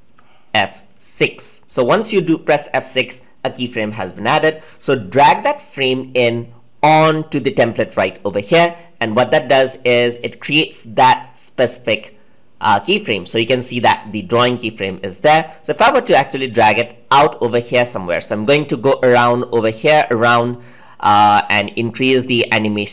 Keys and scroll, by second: 0.0 F6.